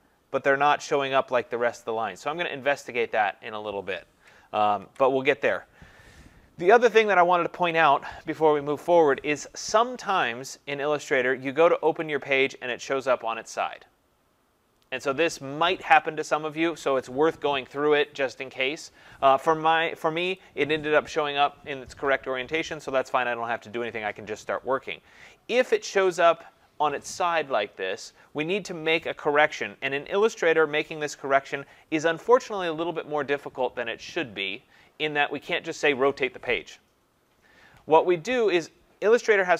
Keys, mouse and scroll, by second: 4.8 ctrl+0, 12.0-17.1 drag, 20.4-25.4 drag, 25.7-30.8 drag.